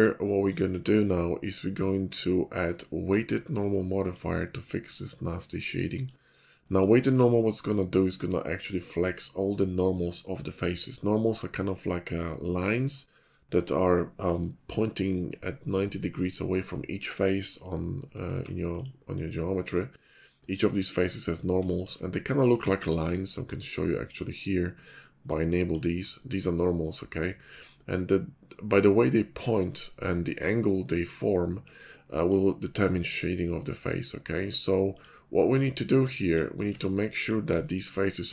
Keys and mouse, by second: 18.3 Tab, 21.6 shift+middle click, 22.5 Tab, 24.1-25.7 drag, 36.7 Tab, 37.5 shift+middle click.